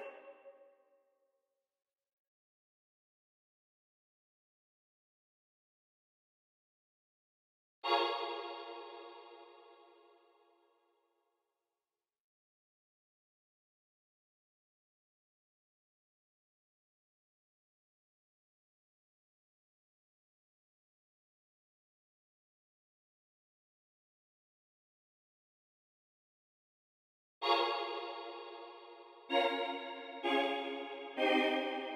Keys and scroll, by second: 1.8 c, 6.8 super+a, 7.1 u, 7.7 space, 8.0 space, 13.6 x, 16.7 v, 17.3 x, 17.7 v, 27.3 space.